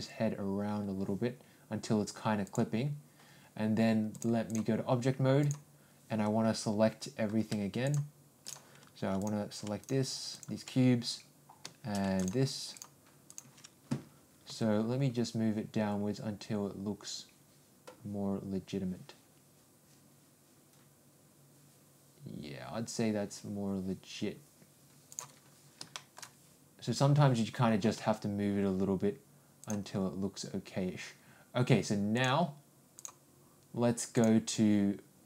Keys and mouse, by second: 0.0 r, 4.1 click, 7.8 shift+click, 8.5 click, 9.8 ctrl+click, 12.1 ctrl+click, 12.7 ctrl+click, 14.5 g, 25.9 shift+middle click, 27.8 g, 32.1 click.